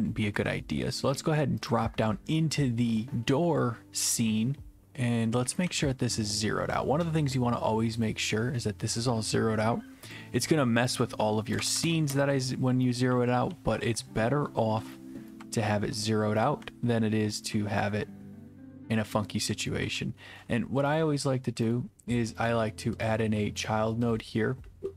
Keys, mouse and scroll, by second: 1.7 click, 5.4-6.3 typing, 6.7 right click, 8.0 click, 10.1 click, 10.9 click, 11.6 0, 11.7 Tab, 11.8 Tab, 11.8 0, 12.0 Return, 13.8-18.0 typing, 14.9 right click, 16.0 right click, 16.9 right click, 17.8 right click, 19.6-20.5 typing, 20.4 right click, 21.0 right click, 21.7 right click, 22.5 right click, 23.1 click, 23.7 right click, 24.5 click.